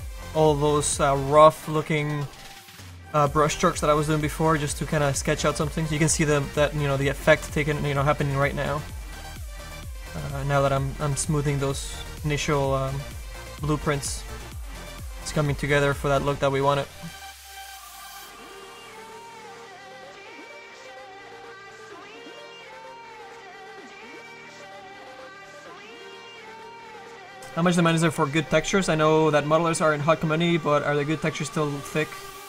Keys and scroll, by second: 8.3 s.